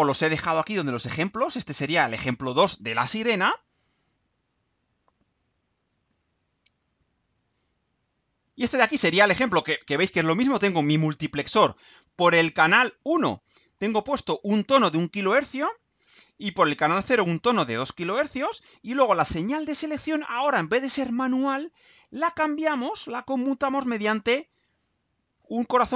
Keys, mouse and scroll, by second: 2.6 click, 4.3 click, 5.9 click, 7.2-8.2 right drag, 8.4 scroll down 1, 8.9-10.5 right drag, 12.0 right click.